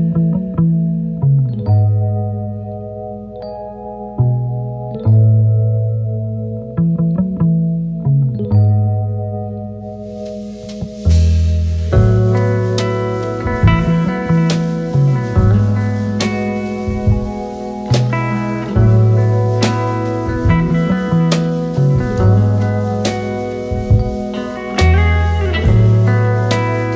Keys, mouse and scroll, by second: 0.2-8.8 drag, 4.7-5.1 drag, 8.8-10.6 typing, 12.2 e, 13.2 ctrl+shift+Left, 15.0-18.3 drag, 19.5 v, 20.2-23.1 drag.